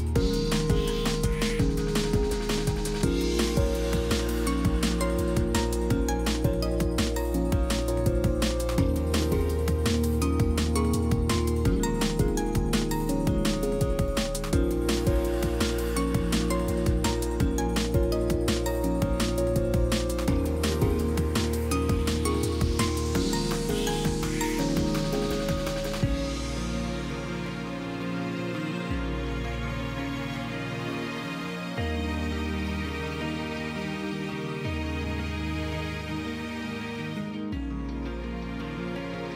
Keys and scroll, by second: 1.6 F8, 2.3-3.0 typing, 5.6 F8, 6.8 typing, 9.0 F8, 9.6-10.0 typing, 38.2 F5.